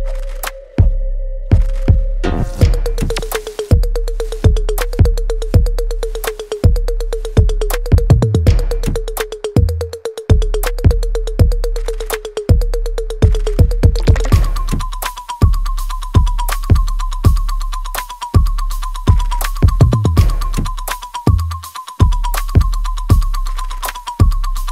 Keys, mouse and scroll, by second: 0.2 alt+click, 0.9 alt+right click, 2.1 click, 4.8-16.0 ctrl+drag, 16.0 alt+right click, 16.9 click, 22.3 click.